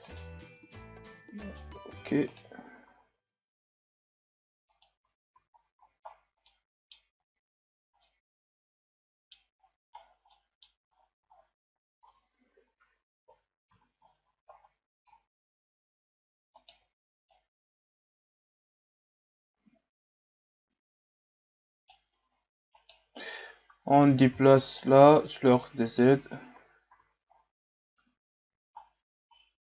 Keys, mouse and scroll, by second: 0.1 alt+right click, 0.7-2.3 drag, 2.3 alt+right click, 2.9 s, 4.9 Tab, 5.3 a, 5.6-6.4 scroll down 4, 5.8 a, 6.4-7.1 middle drag, 7.1-8.0 scroll up 7, 8.0-9.4 middle drag, 9.4 scroll up 1, 9.6-10.3 scroll down 7, 10.3-10.9 middle drag, 10.9-11.3 scroll up 3, 11.3-11.7 shift+scroll down 3, 13.3 KP_1, 14.0-14.3 shift+scroll up 3, 14.6-15.2 scroll up 2, 15.2-15.7 scroll up 3, 15.7 Tab, 16.5 alt+right click, 17.3-20.3 drag, 22.7 alt+right click, 23.4 click, 24.2 ctrl+z, 24.8-26.2 drag, 26.2 Tab, 26.5 a, 26.9 a, 27.2-27.7 scroll down 2, 28.8-29.7 shift+scroll down 9.